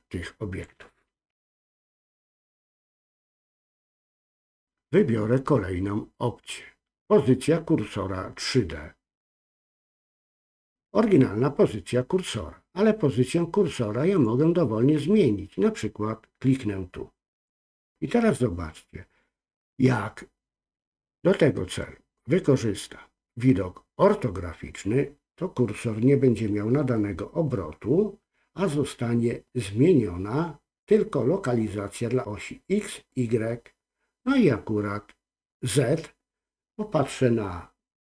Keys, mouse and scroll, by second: 1.4 ctrl+z, 4.3-8.5 drag, 14.1 click, 17.3 click.